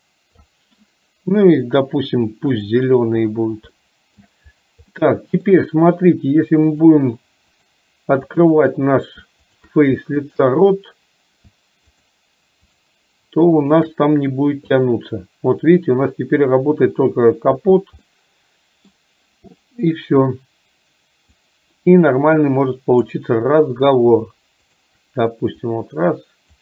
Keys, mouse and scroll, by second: 2.6 click, 3.8 shift+middle click, 5.0 middle click, 6.7 click, 7.5 click, 8.5 shift+click, 9.5 shift+click, 10.3 shift+click, 12.0 shift+click, 13.8 shift+click, 14.9-17.6 drag, 18.1 middle click, 21.4-23.2 drag, 24.7 shift+click, 25.6-26.6 drag.